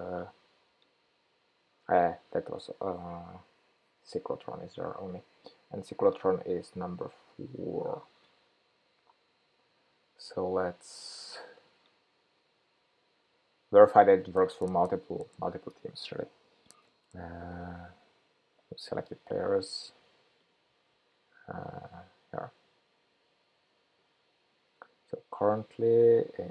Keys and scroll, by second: 19.4 super+b.